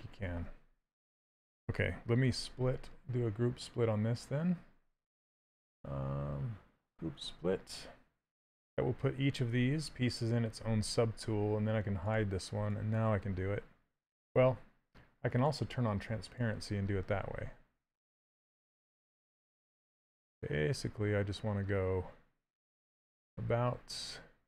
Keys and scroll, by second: 1.9 2, 20.4 shift+space.